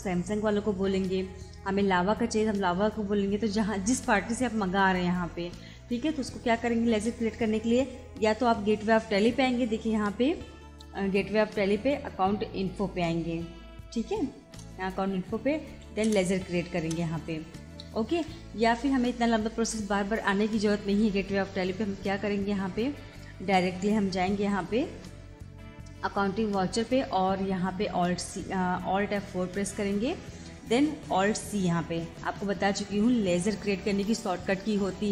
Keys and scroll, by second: 9.9 Escape, 12.1 Up, 14.5 Return, 15.8 Down, 16.1 Return, 21.4 Escape, 24.7 v, 29.4 alt+F4.